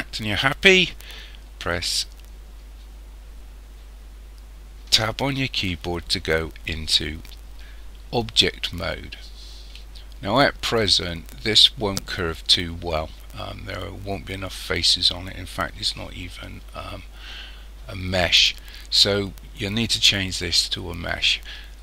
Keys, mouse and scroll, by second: 4.9 Tab.